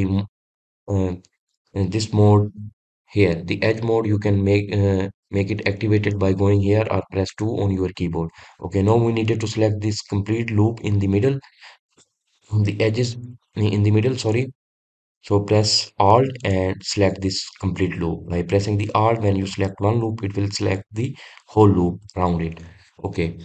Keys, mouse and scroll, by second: 17.2 alt+click.